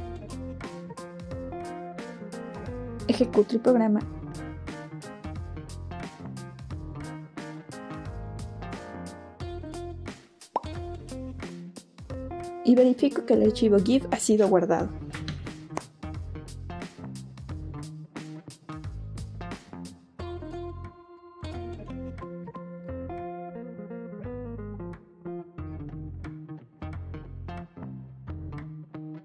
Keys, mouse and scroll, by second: 4.0 click, 13.3 click, 15.0 click, 17.1 click.